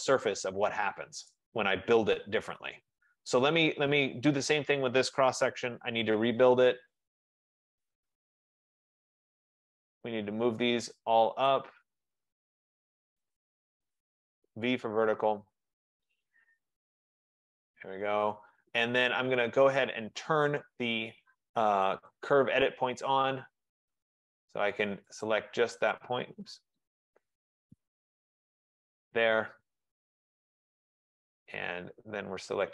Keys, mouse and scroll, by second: 1.4 click, 3.4 click, 6.0-7.1 typing, 8.9 click, 10.1 click, 11.5 shift+click, 13.1 click, 13.9-14.8 typing, 15.6 click, 17.5 click, 22.1 click, 24.0 click, 25.3 click, 26.0 click, 27.0 click, 28.1 Escape, 28.3 Escape, 28.4 Escape, 28.9 click, 30.6 click.